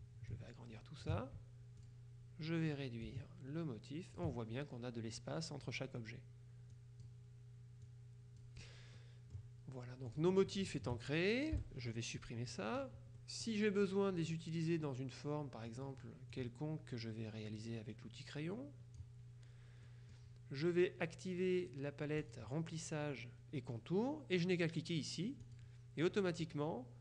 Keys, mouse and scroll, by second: 0.4 ctrl+click, 1.9 click, 3.1-4.8 drag, 6.8 click, 8.0-9.0 drag, 9.1 middle click, 9.2 click, 10.2 click, 10.8 shift+click, 11.6 Delete, 13.2 click, 13.5 middle click, 13.5 click, 14.2 click, 14.2 middle click, 14.4 click, 15.8 click, 20.0 click, 22.3 click, 25.6 click.